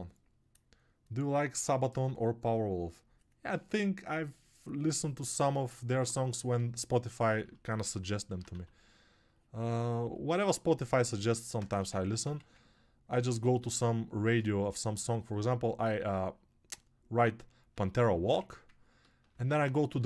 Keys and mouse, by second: 18.6 1.